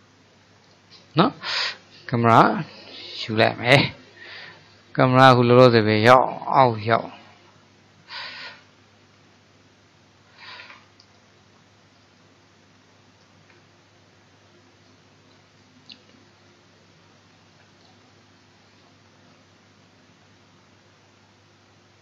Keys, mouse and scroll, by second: 3.0-8.5 middle drag, 8.5 KP_1, 10.6 ctrl+KP_3, 13.6 KP_3, 17.8-21.4 drag.